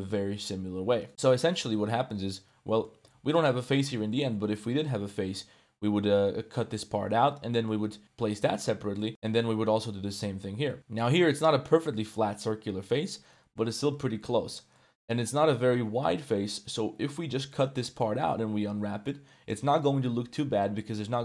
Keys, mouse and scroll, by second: 1.3 Tab, 1.6 Tab, 2.0 middle click, 3.0 1, 3.3 alt+middle click, 4.1 middle click, 7.5 middle click, 8.2 middle click, 9.1 middle click, 11.0-12.7 alt+right drag, 11.0 2, 14.7 middle click.